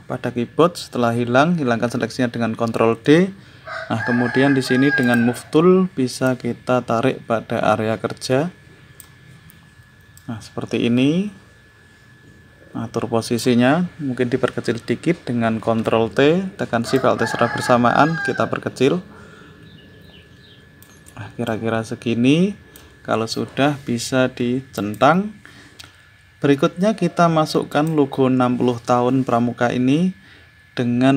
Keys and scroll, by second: 2.8 ctrl+d, 15.6 ctrl+t.